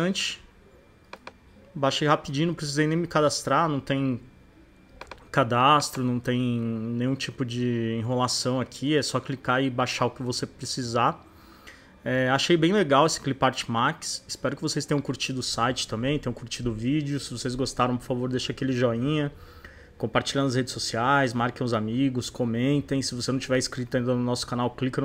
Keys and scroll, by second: 0.4 space.